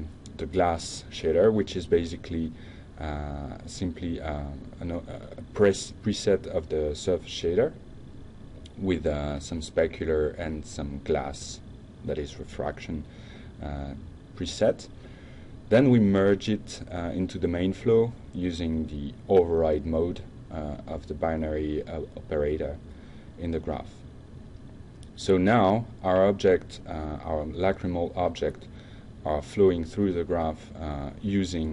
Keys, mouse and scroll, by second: 0.7-2.2 typing, 2.3 Down, 3.4 Return, 5.2-6.2 drag, 12.5 click, 13.2 shift+click, 14.4 shift+click, 15.9 click, 18.0 click, 18.8 click, 20.6 click, 21.7 click, 22.3 click, 23.4 click, 25.3 click, 30.1 click, 31.6 click.